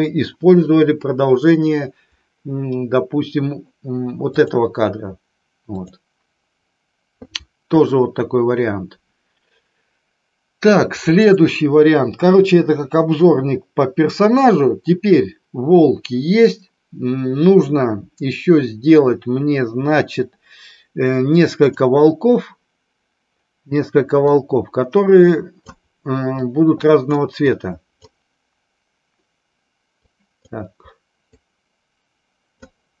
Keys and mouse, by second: 4.3 click, 5.7 click, 21.5 click, 24.3-25.6 drag, 26.5 click, 27.5-28.6 drag, 30.0-30.6 drag, 31.3-32.6 drag.